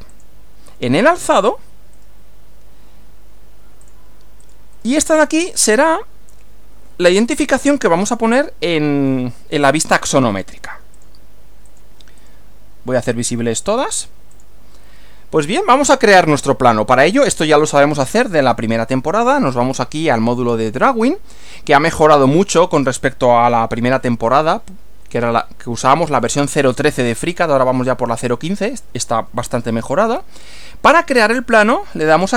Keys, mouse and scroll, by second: 0.1 click, 2.0 right click, 3.8 click, 4.4 click, 5.7 click, 11.0 ctrl+click, 11.6 ctrl+click, 12.2 ctrl+right click, 13.6 click, 14.4 click, 17.5 click, 19.4 click, 32.2 click.